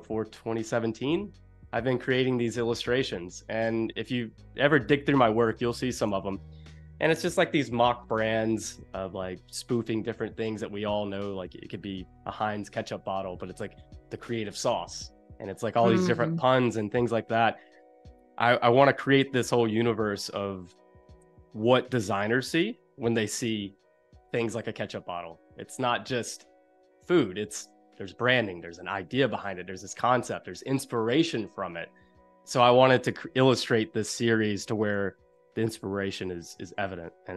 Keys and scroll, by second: 5.6 space, 21.7 p, 35.2 super+u.